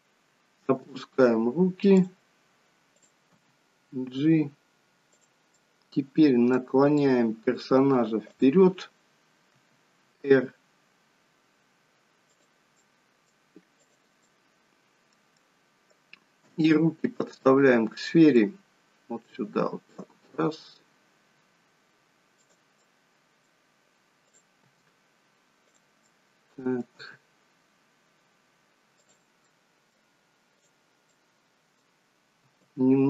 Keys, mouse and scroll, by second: 0.8 g, 3.0 click, 3.4 g, 5.6 middle click, 7.1 middle click, 8.4 click, 9.7 r, 12.9 middle click, 13.9 click, 14.4 middle click, 15.5 middle click, 16.7 g, 18.6 middle click, 19.5 g, 22.9 middle click, 24.4 click, 24.8 g, 26.2 middle click, 27.1 g, 29.5 middle click, 30.6 click, 31.1 middle click, 32.5 r.